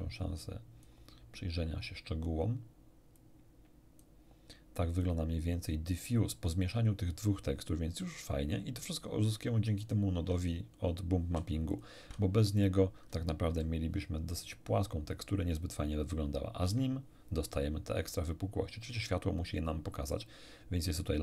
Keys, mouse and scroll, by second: 3.1 click, 5.9 scroll down 2, 9.8 ctrl+shift+click, 11.7 ctrl+shift+click, 12.6 ctrl+shift+click, 13.5 m, 16.7 m.